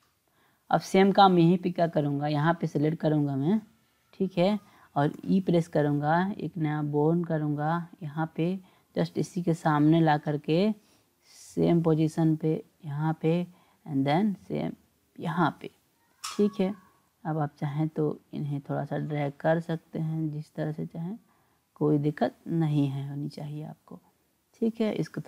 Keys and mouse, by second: 1.8 click, 5.1 e, 8.9 e, 13.2 e, 16.6 click, 18.2 click, 19.0-20.4 drag, 21.6 click, 22.3 click, 24.9 click.